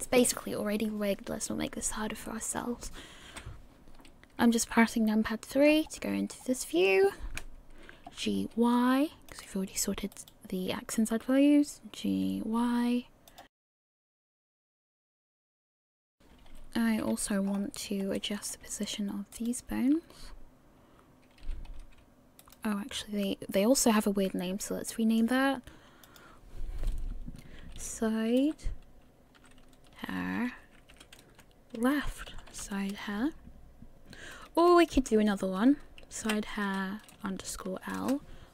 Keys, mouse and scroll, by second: 2.3 middle click, 3.3 KP_3, 5.7 scroll up 2, 6.4-8.1 scroll down 1, 8.1 g, 10.3 right click, 12.4 g, 13.5 scroll down 2, 13.6 right click, 13.7 g, 13.9 right click, 14.1 shift+middle click, 14.2 scroll up 2, 14.3 right click, 14.5 g, 14.7 right click, 15.2 scroll up 2, 15.3 shift+middle click, 15.4 right click, 15.6 right click, 15.7 right click, 15.8 g, 16.0 right click, 16.2 middle click, 16.2 KP_1, 16.9 a, 17.5 scroll up 5, 18.2 shift+middle click, 19.5 right click, 21.4 g, 24.0-24.5 scroll down 1, 24.9 shift+middle click, 26.0 click, 34.7 BackSpace, 35.1 BackSpace.